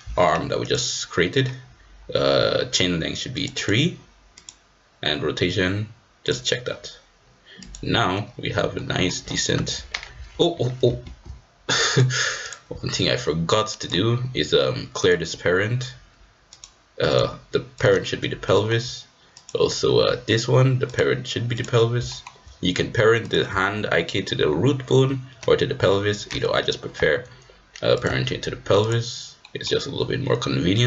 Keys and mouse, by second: 3.4 click, 4.4 click, 6.3 click, 7.6-8.7 drag, 8.7 middle click, 9.5 g, 11.2 ctrl+z, 11.9-12.5 drag, 13.8 click, 15.0 click, 17.2 click, 18.4 shift+middle click, 19.4 click, 20.8 click, 22.0 shift+middle click, 23.2 click, 27.9-28.9 drag, 29.4 click.